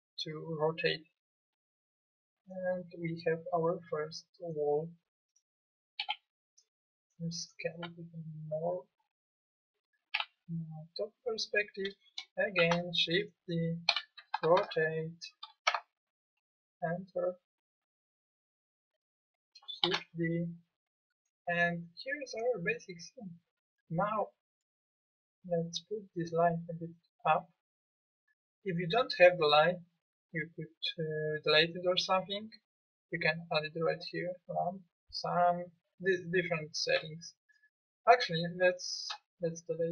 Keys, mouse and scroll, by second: 6.0 s, 7.8 s, 10.1 KP_7, 12.5 shift+d, 13.9 r, 19.8 shift+d.